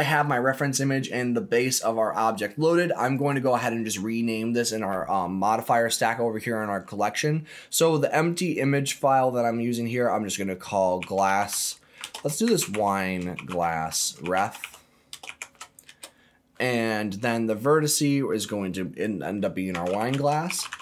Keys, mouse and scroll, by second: 0.0-3.0 scroll down 4, 3.0 click, 3.2-17.1 drag, 13.8 s, 17.8 click, 17.9-20.8 drag.